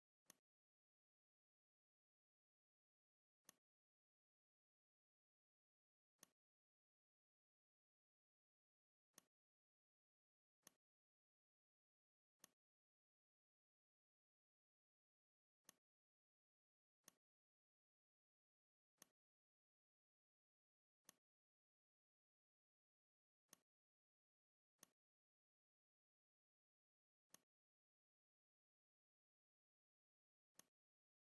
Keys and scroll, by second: 3.1 r, 5.6 v, 10.3 r, 11.7 v, 16.7 r, 18.3 v, 23.1 r, 24.3 v.